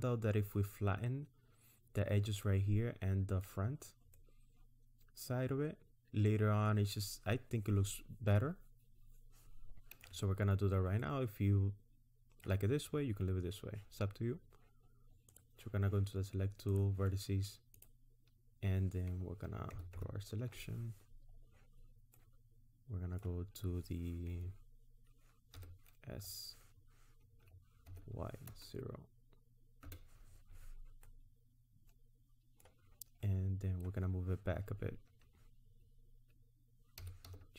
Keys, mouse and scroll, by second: 2.5 middle click, 4.1-4.8 scroll down 1, 4.8 middle click, 10.5-11.0 scroll up 1, 11.0 middle click, 15.3 click, 16.7 click, 17.8 click, 19.7 ctrl+KP_Add, 19.9 ctrl+KP_Add, 22.2 middle click, 25.6 s, 31.1 middle click, 33.3 middle click, 37.0 g.